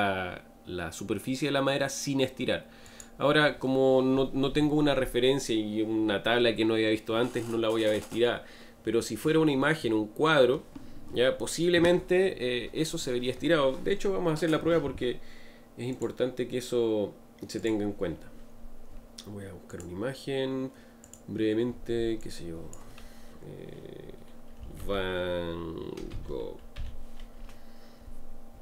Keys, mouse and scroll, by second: 7.5 scroll down 1.